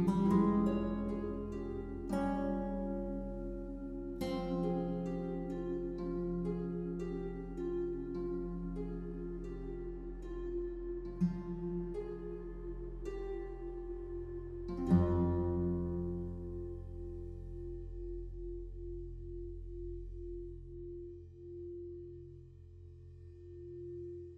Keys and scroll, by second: 9.8 ctrl+t.